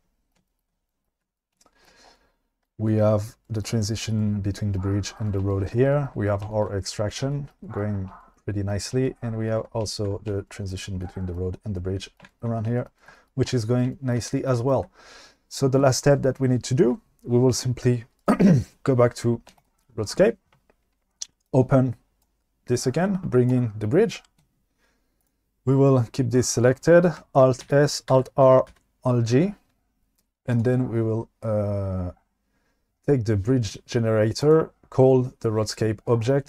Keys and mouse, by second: 19.6 click, 21.4 click, 25.2-27.2 drag, 28.0 alt+s, 28.5 alt+r, 29.0 alt+g, 34.5-34.9 drag.